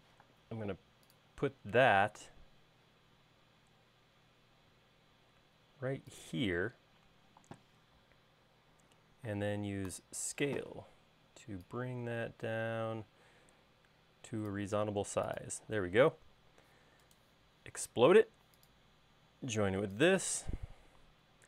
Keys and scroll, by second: 0.3 m, 10.0 s, 15.2 space, 19.2 e, 20.8 space.